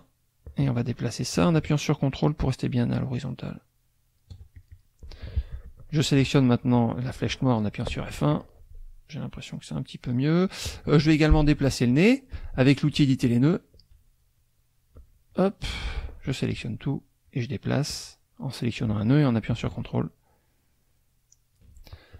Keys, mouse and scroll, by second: 4.5 ctrl+click, 7.9 F1, 8.3 click, 14.4 click, 15.0 F2, 15.3 click, 16.1 click, 17.3-21.7 drag.